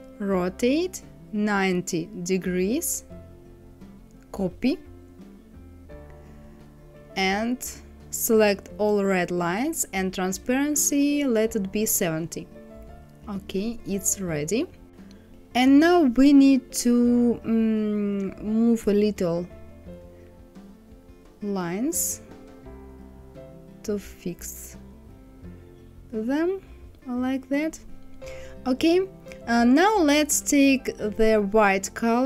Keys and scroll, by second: 1.5 KP_9, 1.8 KP_0, 10.7 KP_7, 10.9 KP_0, 11.3 Return, 23.5 Right.